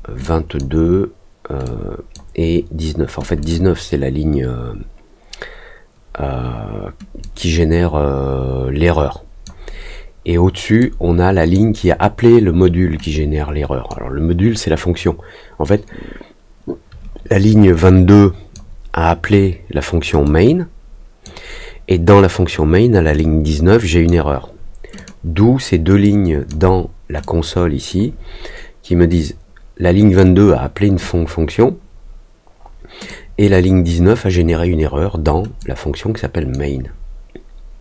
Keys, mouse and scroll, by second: 0.2 click, 1.6 click, 3.3 click, 7.2-9.4 drag, 10.7 click, 13.0 click, 17.4-18.5 drag, 20.2-21.2 drag, 23.1 click, 24.9 click, 26.0 click, 27.2 click, 29.2 click, 33.0-34.3 drag, 35.5 click.